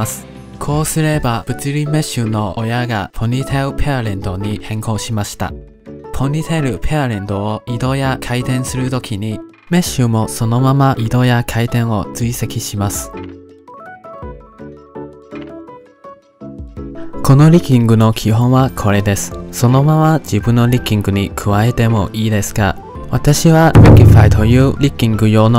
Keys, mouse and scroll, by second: 1.3-2.6 shift+middle drag, 2.6-3.7 drag, 4.1 ctrl+Tab, 4.5 click, 5.1 click, 5.7 g, 9.4-11.7 drag, 11.7-12.6 middle drag, 12.6 g, 15.0 click, 15.7 middle click, 16.0 ctrl+Tab, 16.4 click, 16.7 middle drag.